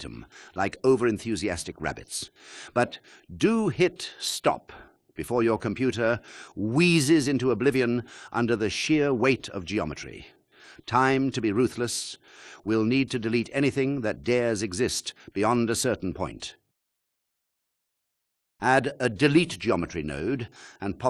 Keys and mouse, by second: 5.1 click, 6.1 shift+drag, 15.6 x, 19.3 shift+a.